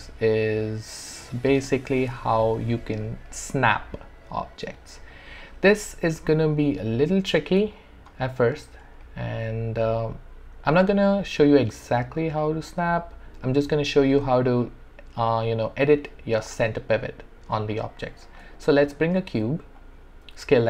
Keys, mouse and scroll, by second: 7.7 alt+click, 8.4 alt+middle click, 9.0 alt+right click, 9.7-12.7 alt+drag, 18.1 alt+click, 18.2 shift+right click, 19.3 r, 19.8-20.6 drag.